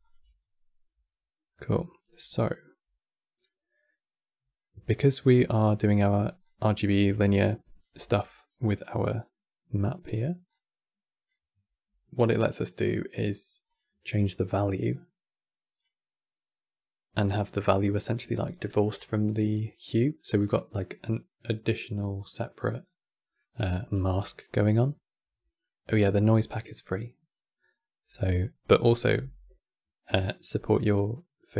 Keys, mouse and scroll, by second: 1.5-6.1 middle drag, 6.1 click, 7.0-8.1 alt+drag, 8.1-10.2 middle drag, 10.2-13.2 drag, 13.4-16.4 drag, 28.7-30.6 middle drag, 30.6-31.5 drag.